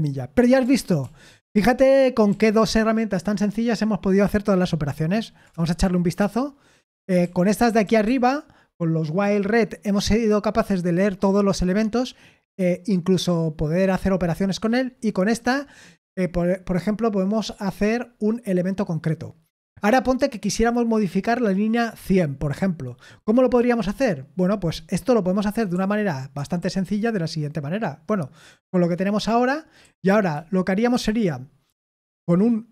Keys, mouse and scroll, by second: 0.7 ctrl+p, 1.0 ctrl+p, 1.4 ctrl+p, 2.2 ctrl+p, 5.5 Return, 6.1-8.3 typing, 15.3-16.0 typing, 25.4-26.8 typing, 29.8-31.0 typing.